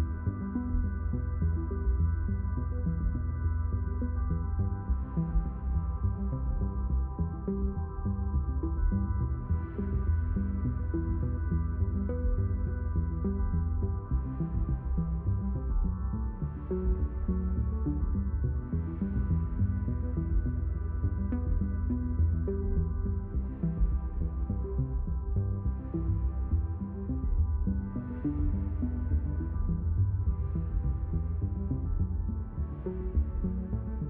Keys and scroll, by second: 2.7 shift+q, 3.9 ctrl+z, 4.6 shift+q, 27.7 ctrl+z, 32.7 ctrl+z.